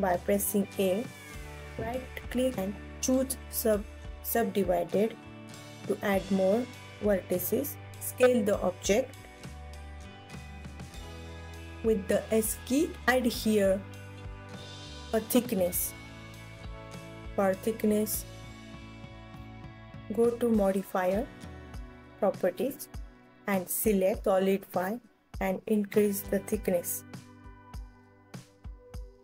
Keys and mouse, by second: 0.6 alt+z, 2.7 click, 3.2-4.3 right drag, 4.3 click, 7.0 right click, 8.3 s, 11.1 click, 12.1 Tab, 12.8 ctrl+s, 12.8 KP_1, 14.8 alt+middle click, 14.9-15.6 alt+drag, 18.5 Tab, 19.6 a, 21.0 click, 21.7 alt+z, 24.5-26.9 drag, 28.9-29.2 drag.